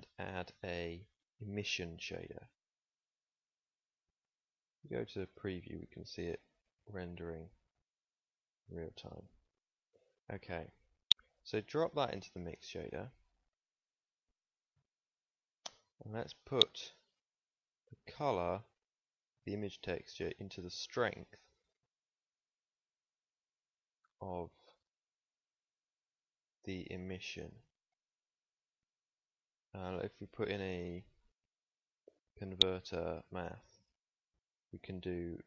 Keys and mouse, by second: 34.6-35.4 drag.